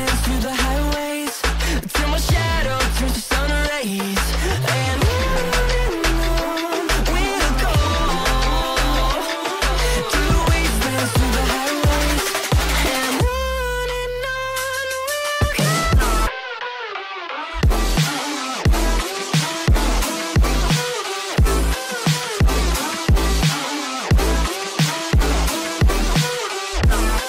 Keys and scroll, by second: 2.9 shift+Page_Down, 20.5 space, 20.7 F3, 22.9 F3, 23.7 ctrl+g, 24.9 shift+F2, 25.1 F3.